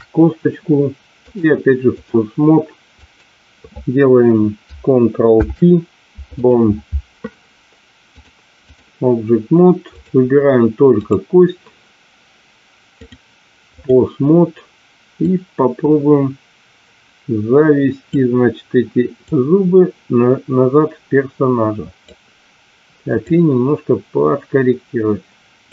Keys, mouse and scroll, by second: 1.2-2.4 drag, 3.0 click, 5.2 ctrl+p, 8.1-9.1 drag, 9.9 click, 11.0 click, 12.9-14.2 drag, 15.6-18.4 drag, 19.1-22.2 drag, 23.3-25.7 drag.